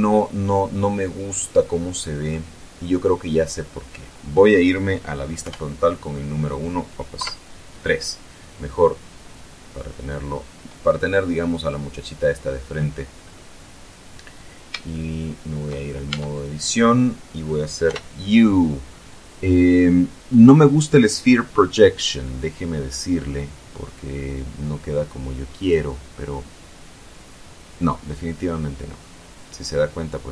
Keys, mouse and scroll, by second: 5.6 KP_1, 7.3 KP_3, 10.1-10.4 scroll down 2, 13.3-13.6 scroll down 2, 13.8 scroll down 2, 15.1 shift+middle click, 16.2 shift+Tab, 18.0 u, 25.7 click.